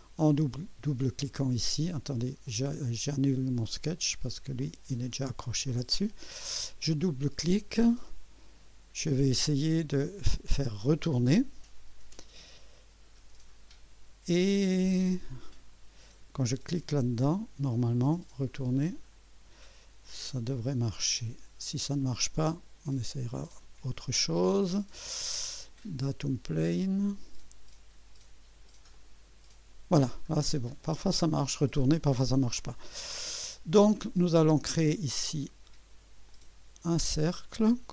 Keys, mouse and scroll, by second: 1.0 click, 2.5 click, 4.6 click, 5.6 Delete, 6.8 click, 9.2-9.8 drag, 10.5 click, 16.7 click, 18.7 click, 23.4 click, 27.0 click, 28.9 click, 30.3 scroll up 2, 30.8 right click, 31.7 scroll up 2, 32.5 right click, 33.7-34.2 scroll up 2, 36.3 click.